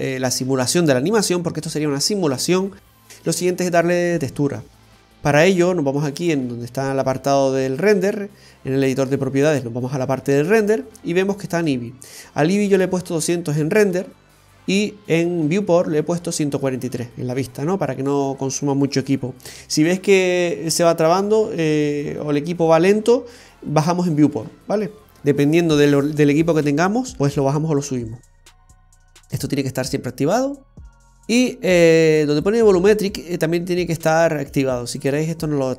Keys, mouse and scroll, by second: 3.1 space, 6.5 click, 9.7 click, 31.1-33.2 scroll down 2, 33.2-35.2 scroll down 6, 35.2 click, 35.2-35.6 scroll down 1, 35.6 click.